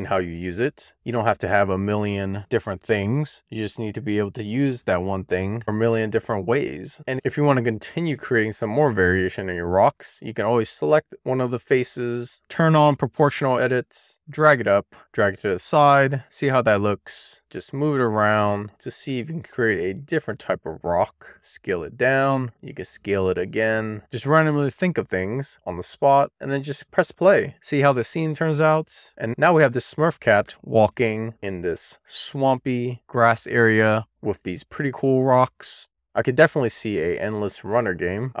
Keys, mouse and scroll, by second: 0.2 middle click, 0.6-1.0 scroll down 1, 1.0 middle click, 1.1-1.5 scroll down 1, 1.5 click, 3.2 click, 5.4 scroll down 1, 5.6 middle click, 6.8 middle click, 6.9 click, 12.5 click, 13.8 click, 16.6 middle click, 16.7-17.1 scroll up 1, 17.1 click, 18.6 middle click, 19.1 click, 19.8 middle click, 20.0 scroll down 1, 20.1 middle click, 20.4 middle click, 20.6 shift+click, 20.8 super+z, 21.3 click, 21.4 click, 21.8 e, 22.2 click, 22.6 w, 22.7 click, 23.4 middle click, 23.9 middle click, 24.3-24.8 scroll down 3, 24.8 shift+middle click, 25.1 Tab, 25.5 middle click, 25.7 scroll up 1, 26.0 middle click, 26.4 click, 27.0 scroll down 1, 27.2 shift+middle click, 28.4 middle click, 28.7 shift+middle click, 29.0 middle click, 29.5 shift+middle click, 30.5 shift+middle click, 31.1 middle click, 34.2 click, 35.1-35.4 scroll up 2, 35.4-36.2 scroll down 2, 36.2-36.8 shift+middle drag, 36.8 middle click, 38.0-38.4 middle drag.